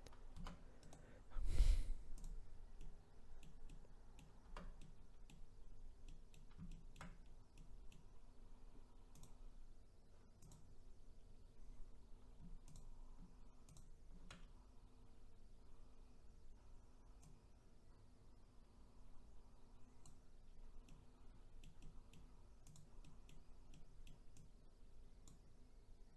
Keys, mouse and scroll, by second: 0.3 Tab, 2.2-2.8 right drag, 2.8-4.5 middle drag, 4.5 Tab, 4.8 middle click, 5.6-6.0 scroll up 2, 6.0-7.2 middle drag, 7.2-7.5 scroll down 1, 7.5-9.2 middle drag, 9.2-10.5 drag, 11.3-12.7 scroll up 1, 12.7 shift+click, 13.7 shift+click, 17.3 click, 20.5-20.8 scroll down 1, 20.8-22.7 middle drag, 22.7 click, 23.0-24.4 middle drag, 24.4 click.